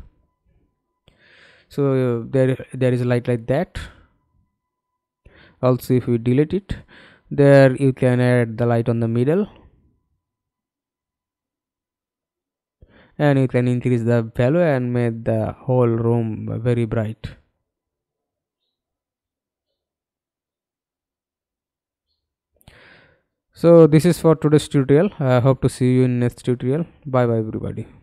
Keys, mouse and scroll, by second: 0.2 alt+middle click, 2.9-3.2 scroll down 2, 4.8 Delete, 5.8 Delete, 7.7 Delete, 8.0 alt+click, 12.3 f, 13.0 alt+click, 14.8-15.3 scroll down 2, 15.3 alt+scroll up 2, 15.9 alt+click, 18.2 alt+click, 20.7-21.9 scroll up 4, 21.9-22.4 scroll down 1, 22.6 scroll down 1, 23.1 alt+click, 26.0 middle click.